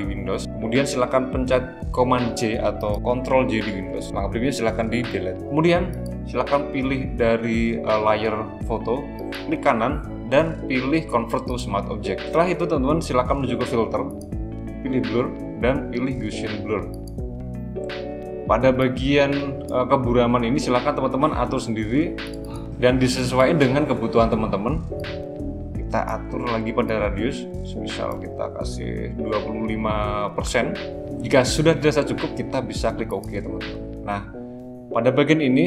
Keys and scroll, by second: 2.5 super+j.